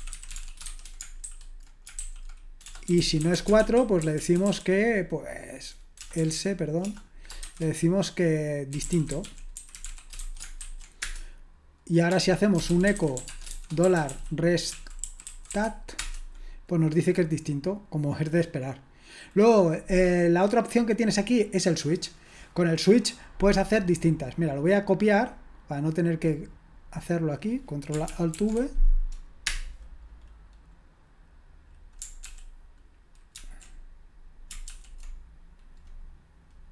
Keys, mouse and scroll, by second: 0.0-4.9 typing, 6.0-7.4 typing, 8.6-16.5 typing, 28.4 ctrl+alt+v, 29.5 Return, 32.3 ctrl+p, 33.4 ctrl+c, 34.7 ctrl+p.